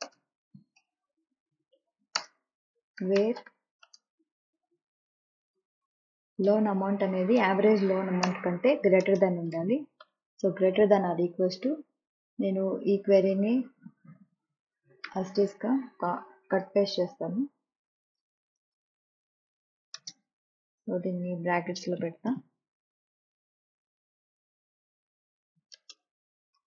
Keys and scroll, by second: 0.0-3.9 typing, 5.5-6.8 typing, 8.1 Return, 8.9 space, 9.9 =, 16.3 ctrl+c, 18.5 ctrl+v, 19.8 space, 21.8 shift+9, 22.4 Left, 25.6 space, 26.3 shift+9.